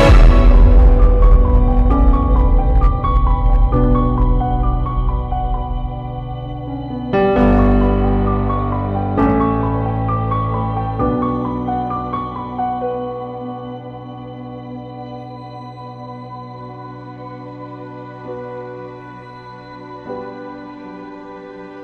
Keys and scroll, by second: 0.0 b, 0.8 [, 3.5 [, 7.7 ctrl+j, 10.2 ctrl+-, 10.8 ctrl+i, 11.6 ], 11.7 [, 13.4 Down, 14.3 Up, 15.3 Right, 15.5 ], 16.6 x, 18.2 x, 19.5 space.